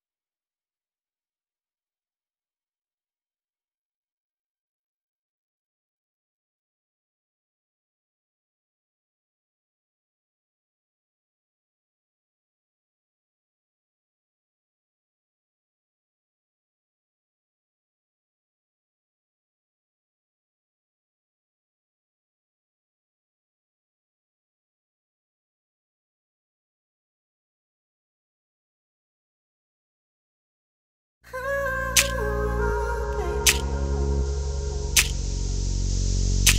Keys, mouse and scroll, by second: 0.4 Tab, 0.6 scroll down 1, 3.5 middle click, 4.0 ctrl+s, 4.3 middle click, 5.5 shift+middle click, 6.0-6.6 scroll up 1, 6.6 scroll up 1, 6.8 middle click, 9.1 click, 10.0 click, 11.2 click, 11.2 g, 12.4 s, 18.3 g, 22.0 click, 22.9 g, 25.0 click, 25.3 click, 26.2 ctrl+s, 32.8 middle click, 33.1 click, 34.0 click, 35.1 click, 35.2 Tab, 35.4 middle click, 36.0 1.